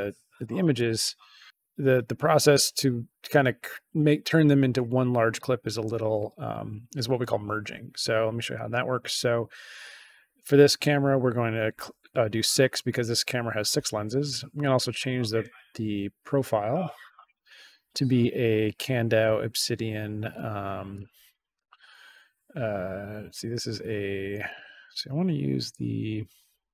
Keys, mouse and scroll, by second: 0.7 click, 14.5 click, 16.0-16.4 scroll down 2, 16.7-17.1 scroll down 2, 20.9 click, 24.4-26.7 drag.